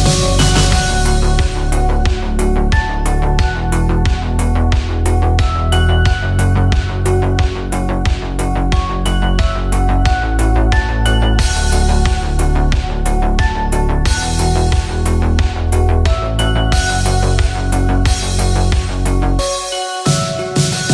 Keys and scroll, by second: 7.8 ctrl+shift+], 13.6-16.0 typing, 18.9 ctrl+t.